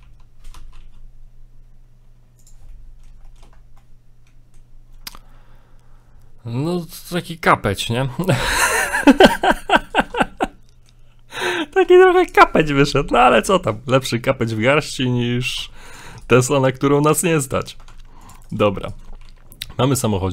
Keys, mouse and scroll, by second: 0.0 g, 2.7 middle click, 3.3 shift+middle click, 3.6 scroll down 2, 3.8 middle click, 5.1 ctrl+z, 6.8 middle click, 7.3 middle click, 8.2 right click, 8.4 middle click, 9.1 ctrl+right click, 9.8 ctrl+right click, 10.4 middle click, 12.2 alt+right click, 12.8 s, 14.2 middle click, 14.5 middle click, 14.6 scroll up 2, 15.6 ctrl+Tab, 16.3 right click, 17.0 middle click, 17.9 ctrl+Tab, 18.5 right click, 18.8 right click, 18.9 shift+right click, 19.2 shift+right click, 19.2 g, 20.2 middle click.